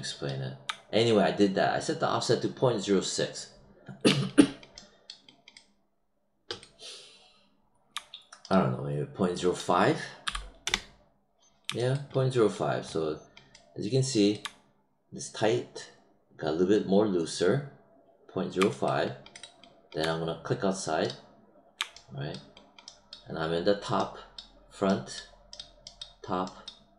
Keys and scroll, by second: 10.6 Return.